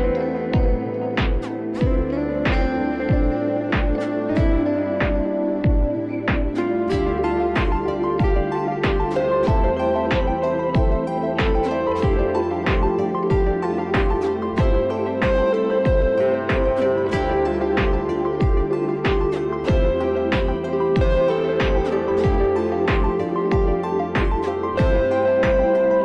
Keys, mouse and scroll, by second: 0.0 click, 0.1 click, 1.0-2.0 alt+scroll, 5.0 click, 8.3 alt+scroll, 10.5 click, 12.3 click, 14.8 click, 15.9 right click, 17.4 click, 19.8 ctrl+t, 20.8 right click, 21.6 click, 23.4 click, 25.1 click, 25.7 click.